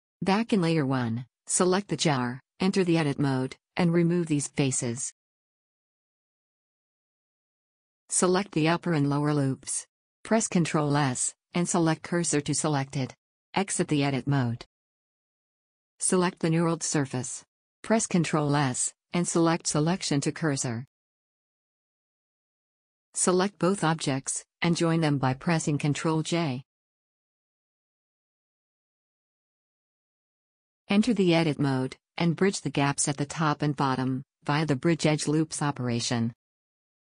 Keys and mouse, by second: 0.6-1.2 middle drag, 1.2-3.4 drag, 3.4 Tab, 4.7 ctrl+z, 5.7 x, 8.7-10.5 middle drag, 10.5-12.3 drag, 11.2 shift+s, 13.9 Tab, 19.3 shift+s, 26.9 ctrl+j, 31.4 Tab, 31.9 middle click, 32.1 middle click, 32.3 middle click, 32.7 middle click, 33.4 a, 35.8 w.